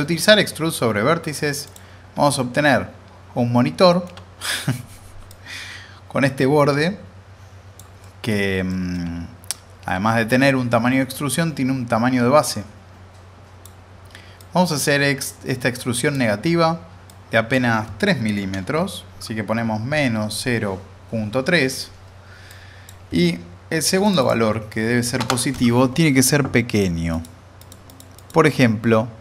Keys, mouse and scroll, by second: 1.6 click, 2.2-4.1 alt+middle drag, 5.3-7.8 drag, 8.0 alt+middle click, 9.2-9.5 scroll up 1, 9.5-10.1 alt+middle drag, 11.1-13.9 drag, 22.5-23.1 drag, 27.1 click.